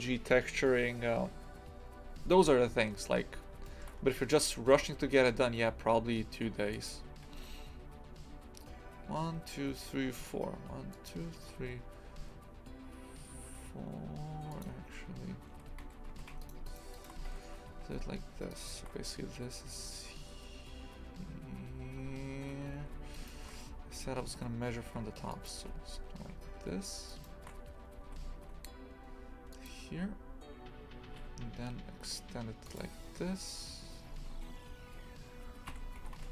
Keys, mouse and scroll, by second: 2.8-3.6 scroll up 6, 3.6 shift+middle click, 3.9-4.7 scroll up 4, 4.7 e, 7.2 e, 15.8 2, 16.0 a, 16.4 alt+shift+right click, 16.6 alt+shift+right click, 16.9 alt+shift+right click, 17.2 ctrl+x, 18.5-22.6 alt+shift+right drag, 22.6 a, 23.1-24.2 alt+shift+right drag, 24.2 g, 27.1 alt+shift+right click, 28.1 g, 34.1 e, 36.0 g.